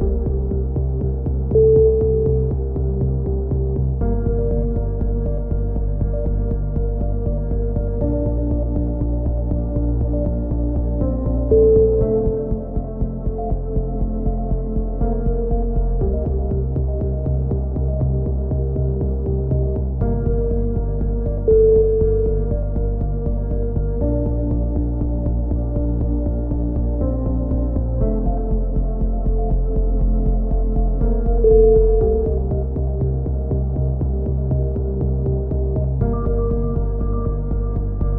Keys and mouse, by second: 1.0-2.3 middle drag, 1.7 c, 2.3-3.4 drag, 2.6 right click, 4.5 a, 4.8 z, 5.0 middle click, 5.2 Tab, 5.8 click, 6.8 middle click, 6.8 KP_7, 7.2 z, 8.5 ctrl+KP_7, 10.1-12.4 middle drag, 12.4 Tab, 13.3 b, 14.0 click, 14.3 b, 14.8-16.0 middle drag, 16.0-18.1 middle drag, 16.5 s, 21.1 b, 22.0-24.0 middle drag, 26.0 a, 26.5 middle click, 27.2 click, 28.0 KP_3, 28.2-29.5 middle drag, 29.5 b, 31.3 ctrl+KP_7, 32.0-34.0 middle drag, 33.1 a, 34.0 KP_1, 35.5 z, 36.0 z, 36.6 click.